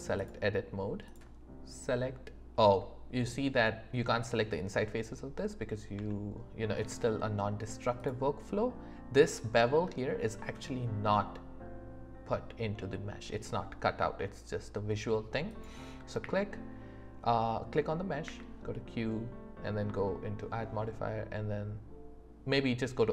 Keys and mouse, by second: 1.0 click, 6.0 Tab, 15.5 click, 16.2 q, 18.2 q.